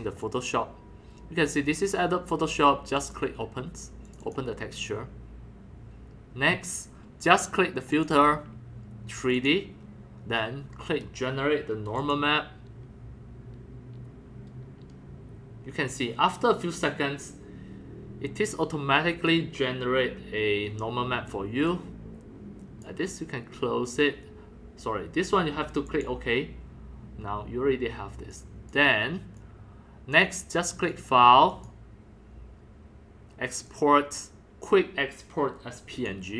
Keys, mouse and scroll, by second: 0.2 click, 1.5 click, 3.0 click, 4.1 click, 4.2 click, 8.0 click, 9.4 click, 12.0 click, 14.2-17.2 drag, 21.7-22.7 drag, 22.8-25.7 drag, 25.9 click, 26.2 click, 28.3-28.7 drag, 29.4-30.1 drag, 30.9 click, 31.5 click, 33.7 click, 35.7 click.